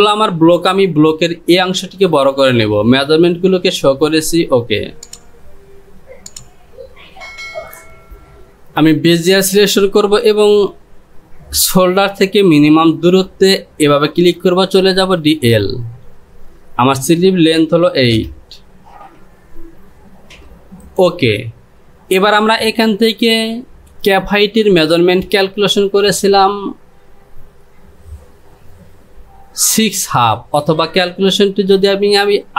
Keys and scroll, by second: 17.8 KP_8, 18.2 Return.